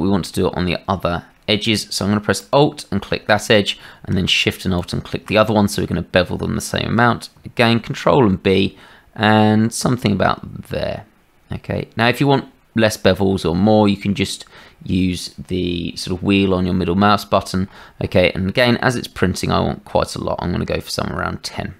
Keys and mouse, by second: 2.3 alt+click, 7.7 ctrl+b.